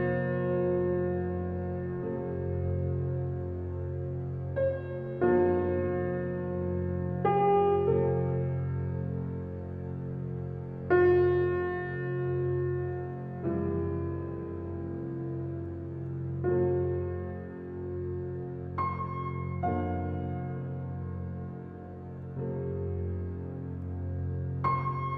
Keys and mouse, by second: 0.2 alt+middle click, 1.2 alt+middle click, 3.4 click, 5.4-5.8 drag, 6.4-7.2 typing, 8.1 click, 8.9-12.0 typing, 9.1 click, 10.3-11.4 drag, 13.1 click, 14.2 click, 14.8 click, 18.1-19.4 drag, 19.3-20.5 typing, 19.4 middle click, 19.6 click, 19.8 middle click, 20.0-21.6 drag, 21.7-23.5 drag, 22.7-23.5 typing, 24.2-25.1 drag.